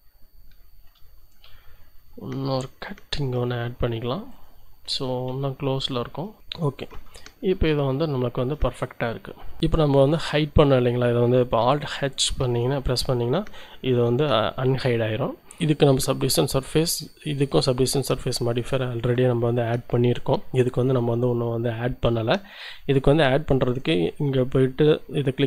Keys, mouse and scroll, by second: 0.6 shift+middle click, 3.1 ctrl+r, 3.7 ctrl+click, 4.3-5.4 middle drag, 5.4 click, 5.4 z, 6.1 Tab, 6.9 1, 7.4 scroll down 1, 8.2-8.7 scroll down 1, 8.9-9.6 scroll down 4, 9.6-10.6 shift+drag, 12.4 alt+h, 15.4 click, 16.2-17.6 drag, 20.7 click, 23.1 click.